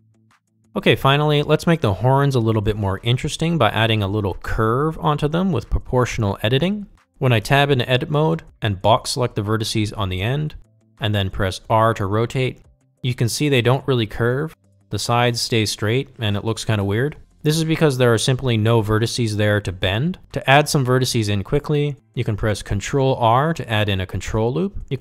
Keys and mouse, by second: 6.3-6.7 shift+middle drag, 7.3 shift+middle drag, 8.1 Tab, 10.4 alt+z, 11.3 click, 13.6 r, 24.2 ctrl+r.